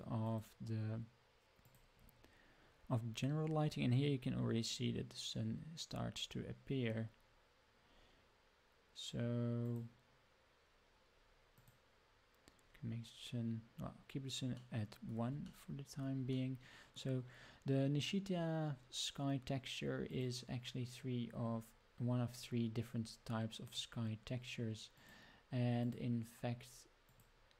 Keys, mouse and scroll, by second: 0.2 click, 1.6 click, 2.9 scroll down 1, 9.6 click, 11.5 click, 14.5 middle click, 15.4-16.0 shift+middle drag, 16.3-17.0 middle drag, 20.0-23.7 drag, 24.9-25.9 drag, 27.0-27.5 drag.